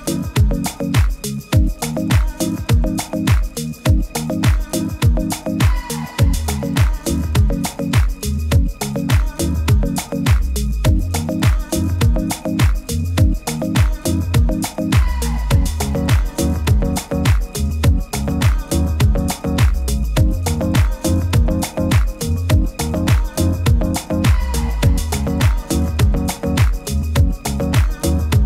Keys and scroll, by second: 6.6 super+-, 6.8 super+-, 7.2 super+-.